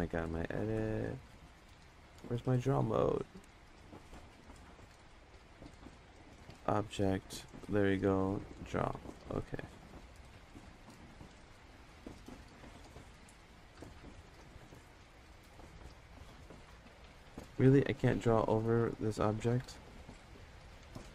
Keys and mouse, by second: 6.1-6.5 drag, 8.1-8.6 drag, 10.6 click, 11.3 click, 12.5 Tab, 13.0 click, 13.5 Tab, 15.5 click, 17.5 ctrl+z, 18.0 click, 19.6 ctrl+z.